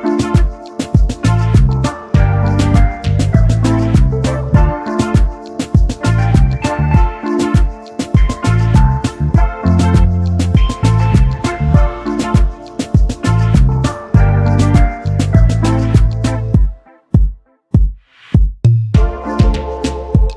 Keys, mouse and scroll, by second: 1.1 alt+shift+click, 2.3-2.9 alt+scroll down 2, 2.9 double click, 3.5 alt+scroll down 1, 3.8 space, 4.2 alt+scroll up 1, 4.7 double click, 5.1 space, 20.2 alt+scroll up 1.